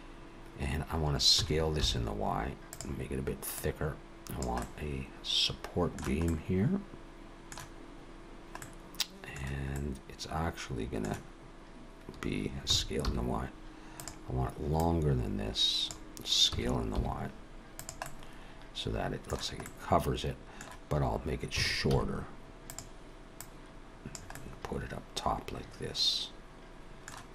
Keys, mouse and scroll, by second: 1.4 s, 3.6 click, 4.6 middle click, 6.2 middle click, 8.6 middle click, 9.7 middle click, 12.7 s, 14.8 click, 16.5 s, 18.0 middle click, 19.6 middle click, 21.6 s, 23.4 click, 24.3 middle click.